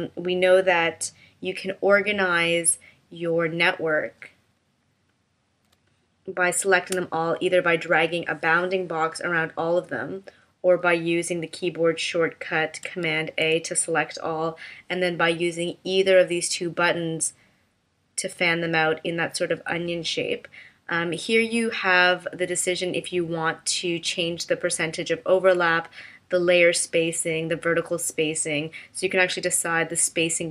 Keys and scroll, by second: 5.7 space, 13.1 super+a.